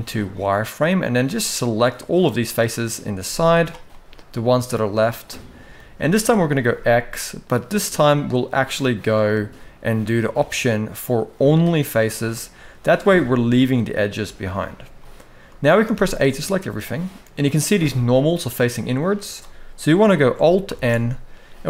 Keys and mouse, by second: 0.7 click, 2.2 middle click, 2.9 z, 3.6-5.4 middle drag, 5.8 shift+middle click, 6.4 x, 12.1 middle click, 13.3-14.3 middle drag, 14.7 shift+middle click, 15.6 a, 16.0 middle click, 17.8 middle click, 20.4 alt+n.